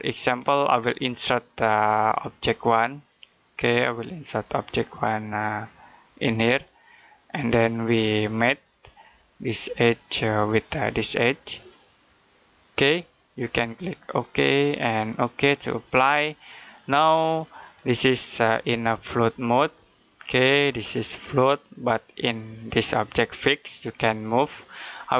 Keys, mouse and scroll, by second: 0.3-0.6 scroll down 1, 1.6 click, 4.6 click, 13.9 click.